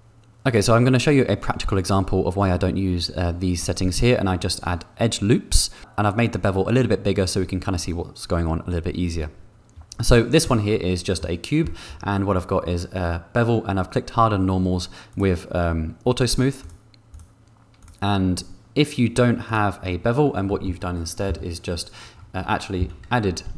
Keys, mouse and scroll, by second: 11.1 middle click, 16.5 click, 19.4 click, 20.4 middle click, 21.5 Tab, 23.0 a.